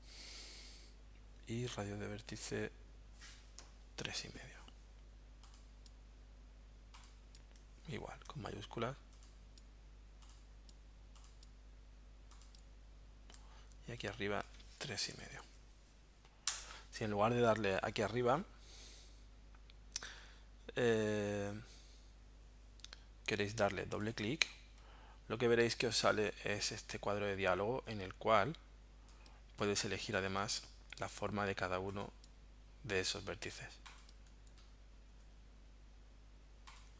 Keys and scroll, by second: 14.7-15.9 typing, 16.5 Return.